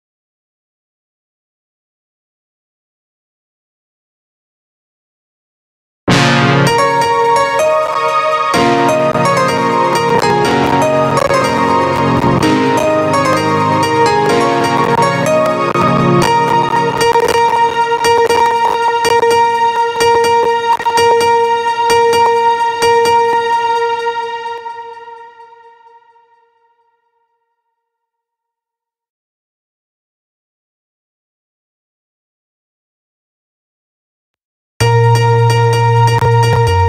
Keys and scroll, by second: 5.5 space, 23.9 space, 33.7 space.